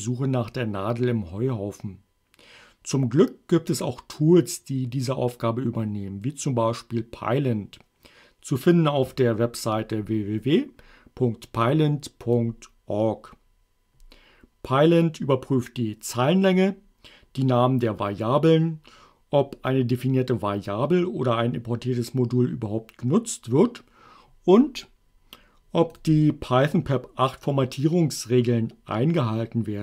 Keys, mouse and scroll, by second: 12.2 click, 26.0 click.